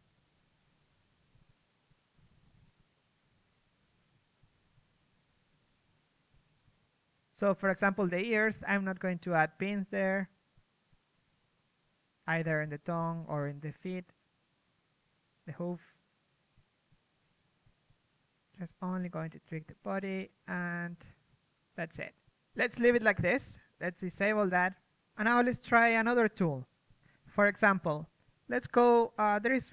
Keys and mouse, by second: 1.0 click, 1.0 p, 1.2 right click, 1.2 s, 1.7 right click, 2.1 s, 2.3 click, 2.5 right click, 2.6 g, 4.0-8.3 typing, 4.4 click, 5.8 click, 8.6 middle click, 10.4 a, 10.5 a, 12.9-16.4 typing, 17.5 a, 19.0 g, 21.7 a, 21.8 a, 22.0 a, 26.2-27.8 typing, 26.8 click.